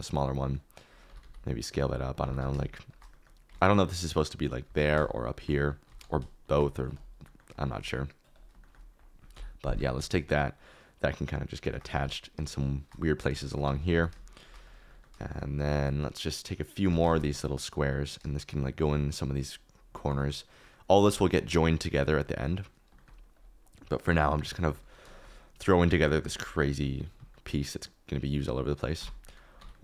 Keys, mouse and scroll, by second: 0.0 middle click, 1.0 s, 1.2 z, 2.2 g, 2.3 z, 3.6 ctrl+z, 4.6 g, 4.8 z, 5.8 alt+d, 6.0 z, 7.5 shift+middle click, 8.5 shift+middle click, 9.3 KP_7, 9.9 alt+d, 11.8 alt+d, 13.6 s, 13.9 g, 15.1 shift+middle click, 15.6 shift+middle click, 16.8 alt+d, 17.0 shift+z, 19.2 KP_Decimal, 22.9 shift+middle click, 23.9 KP_7, 24.6 shift+middle click, 25.0 shift+middle click, 25.9 shift+middle click, 26.0 shift+click, 27.3 shift+middle click, 29.0 Tab, 29.2 middle click, 29.5 3, 29.7 middle click.